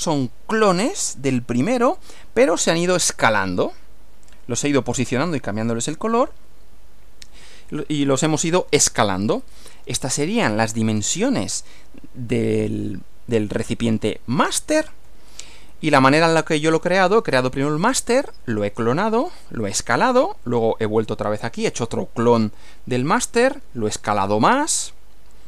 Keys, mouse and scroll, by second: 9.3 Right, 15.6 Right.